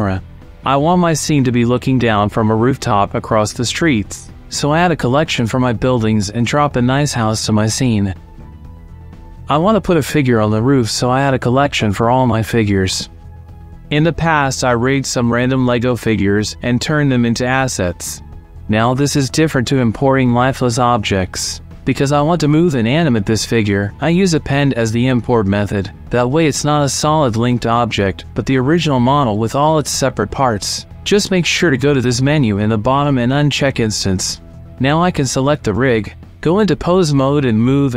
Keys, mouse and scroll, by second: 4.7-6.1 drag, 6.4 alt+g, 6.6 click, 7.1 x, 7.3 click, 7.4 g, 7.5 y, 7.7 shift+click, 8.0 click, 8.6-10.3 typing, 9.1 KP_Subtract, 10.9 middle click, 11.0 middle click, 11.3 click, 11.8 click, 12.4 click, 13.1-14.7 drag, 16.4 click, 23.6-25.3 drag, 26.8-27.8 drag, 33.6-34.7 middle drag, 35.7 click, 36.4 Tab, 37.8 click.